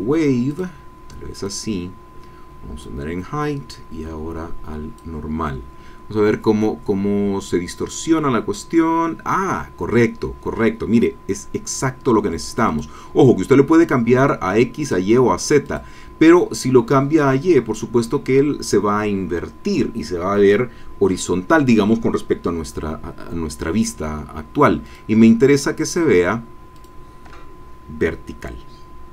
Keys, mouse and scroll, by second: 0.5-3.0 drag, 3.7-5.2 drag, 12.6 click, 14.8 click, 15.6-17.3 drag, 24.8 click, 26.7 click.